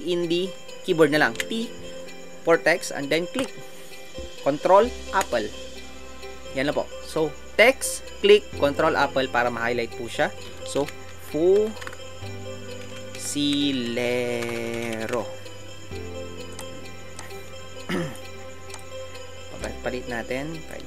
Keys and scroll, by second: 1.7 t, 10.8 shift+f, 16.9 typing.